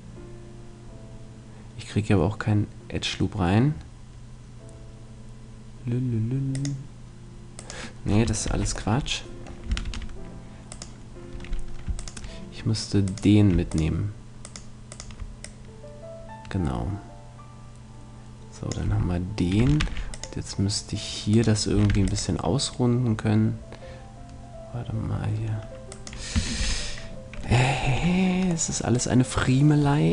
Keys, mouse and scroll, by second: 8.5 ctrl+z, 8.9 middle click, 9.8 ctrl+r, 10.8-16.7 right drag, 15.4-17.3 drag, 18.9 a, 19.8 ctrl+r, 21.4-23.1 right drag, 21.9 ctrl+r, 26.1-27.8 right drag, 26.6 ctrl+z, 27.8 ctrl+z, 28.7-30.1 middle drag.